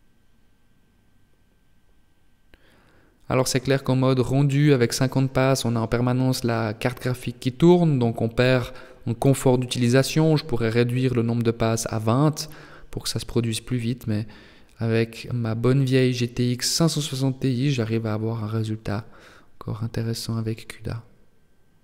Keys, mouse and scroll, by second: 0.6 shift+middle click, 0.6-2.4 shift+scroll up 1, 2.4 right click, 5.8 click, 10.0 click, 12.2 click, 13.7 shift+middle click, 13.7 right click, 13.7 shift+scroll up 1.